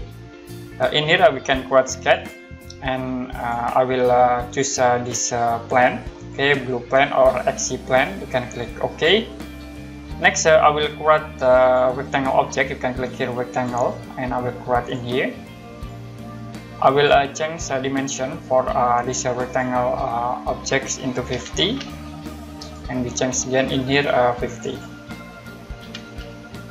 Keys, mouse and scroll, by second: 2.1 click, 6.1 click, 8.9 click, 11.6 click, 13.5 click, 19.2 click, 21.1-22.3 typing, 22.6 click, 25.8-26.2 typing.